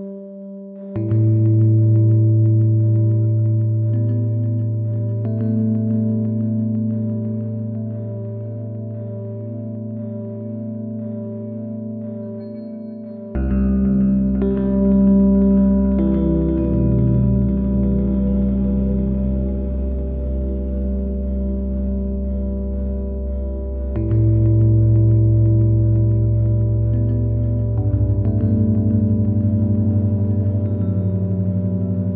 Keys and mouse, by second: 5.0 click, 7.1 s.